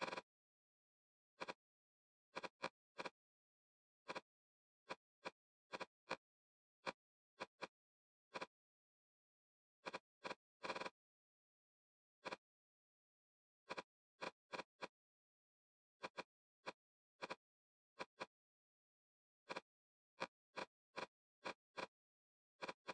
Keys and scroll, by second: 0.2 l, 0.6 6, 7.8 e, 8.7 l, 11.4 5, 19.0 f.